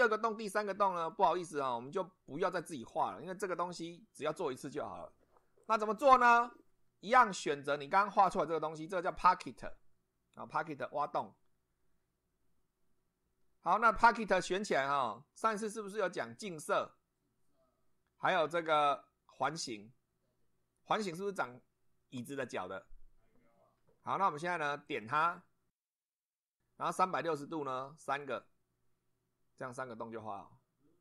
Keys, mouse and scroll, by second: 1.0 click, 7.4-7.9 drag, 9.0 click, 24.9 click, 28.0 click.